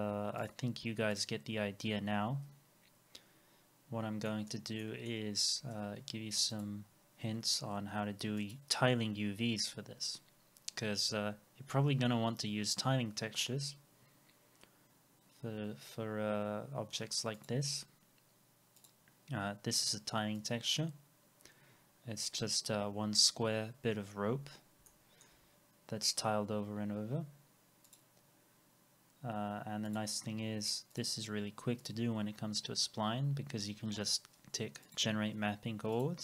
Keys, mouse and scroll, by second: 3.3 scroll down 1, 4.3 middle click, 4.8 alt+middle click, 19.5 scroll up 1, 22.2-22.5 scroll up 1, 24.4 scroll down 1, 24.9 alt+middle click.